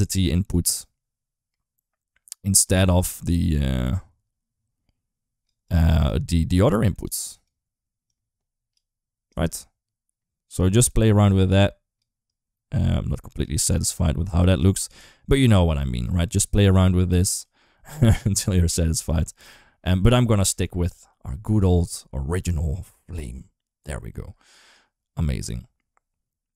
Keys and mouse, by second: 0.5 click, 2.9-5.2 drag, 5.5 click, 6.2 click, 7.0 click, 7.9 click, 9.1-10.4 drag, 11.1 click, 12.1-13.2 drag, 13.6 click, 14.4 click, 15.3-16.4 drag, 16.5 click, 17.9 click, 18.5 click, 20.2 click, 20.4 ctrl+x, 21.0 click, 21.3-23.0 drag, 24.5-26.5 drag.